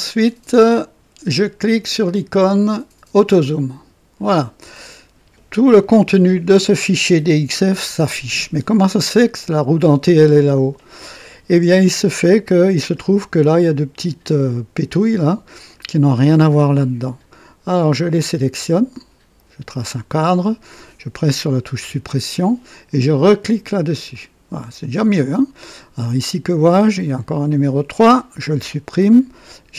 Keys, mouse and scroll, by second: 3.4 click, 12.1-13.1 middle drag, 17.8-20.0 drag, 21.8 Delete, 23.9 click, 26.9 click, 28.5 Delete.